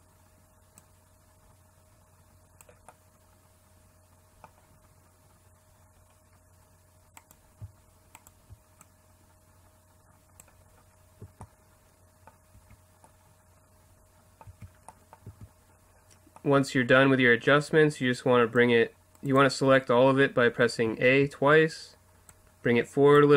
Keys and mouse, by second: 0.8-2.4 drag, 2.9 middle click, 7.2-9.9 right drag, 8.8-10.6 drag, 10.6 middle click, 11.2 a, 12.5 Tab, 14.5 Tab, 15.2 a, 18.6 middle click, 19.1-20.3 drag, 20.8 a, 21.0 a, 22.3-23.3 drag.